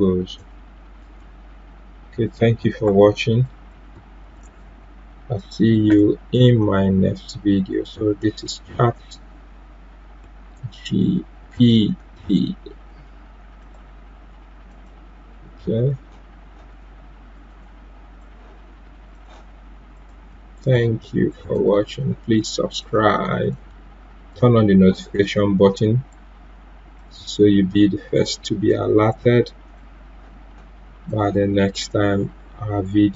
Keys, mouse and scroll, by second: 2.2 click, 4.0-5.8 typing, 8.0 typing, 13.6-19.1 drag, 19.9 shift+click, 20.7 shift+c, 21.5-26.8 shift+drag, 26.9 shift+Num_Lock, 26.9-31.1 shift+drag.